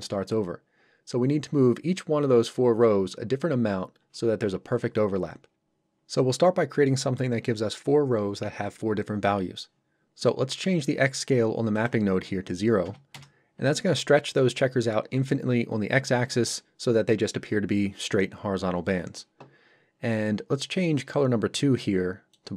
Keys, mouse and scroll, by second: 11.8 click, 12.8 KP_0, 13.1 Return, 21.0 click.